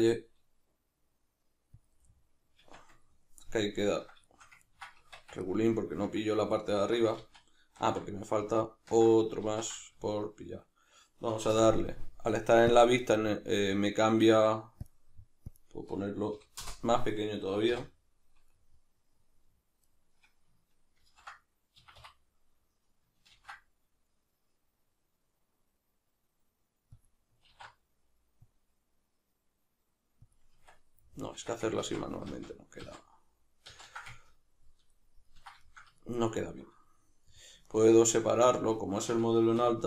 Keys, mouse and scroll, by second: 1.8 click, 2.1-12.7 middle drag, 2.6 Tab, 5.0 Tab, 7.3 ctrl+z, 10.0 z, 11.5 n, 12.7 click, 14.9-18.6 drag, 16.7 Return, 17.7 n, 18.6-19.8 middle drag, 19.8 shift+right click, 21.0 ctrl+n, 21.8 Escape, 23.3 ctrl+b, 27.1 click, 27.5 alt+e, 30.3 click, 30.5 Tab, 31.9 ctrl+z, 34.2-39.8 ctrl+middle drag, 39.6 2.